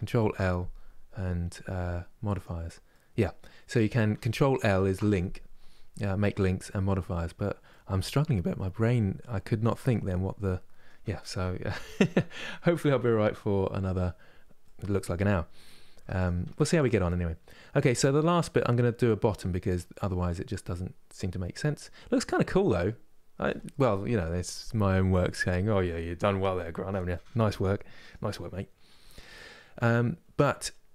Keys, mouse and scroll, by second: 2.6-4.5 middle drag, 4.5 ctrl+l, 7.4-13.9 middle drag, 14.3-15.7 middle drag, 15.7 Tab, 15.9 click, 16.2 Tab, 16.5 click, 16.8-19.3 middle drag, 19.3 scroll down 2, 19.8-28.3 middle drag, 28.3 scroll up 2, 28.7 Tab, 29.0-30.9 middle drag.